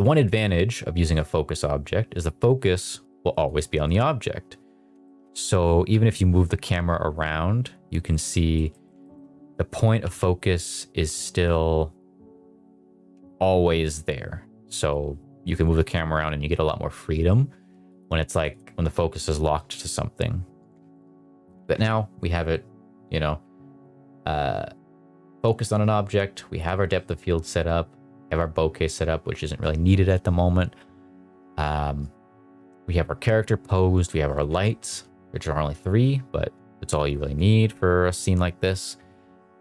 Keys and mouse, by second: 3.4 click, 3.8 middle drag, 5.0 shift+middle drag, 8.0 Escape, 8.0 g, 8.3 middle click, 8.7 middle click, 9.0 shift+middle click, 10.0 g, 12.9 Escape, 15.7 KP_0, 17.8 click, 18.4 click.